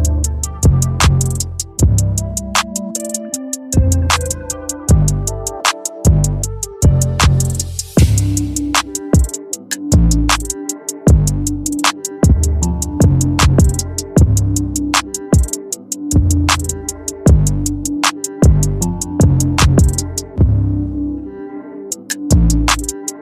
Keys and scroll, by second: 20.4 Return.